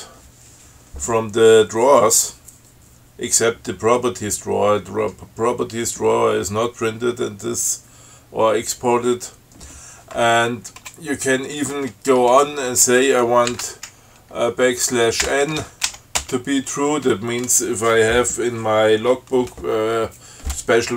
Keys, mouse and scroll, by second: 11.1 space, 15.5 n, 16.2 shift+t, 16.5 shift+space.